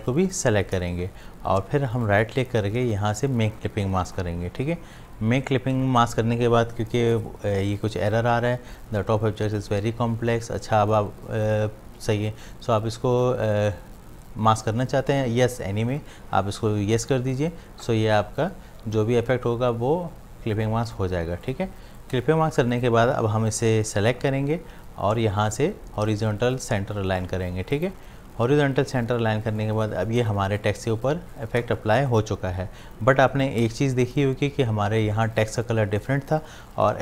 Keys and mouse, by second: 0.3 shift+click, 2.0 right click, 4.1 click, 17.1 click, 21.3 space, 21.5 click, 21.8 space, 22.7 click, 27.7 click, 29.4 space, 29.6 click, 29.9 space, 30.2-37.0 ctrl+drag.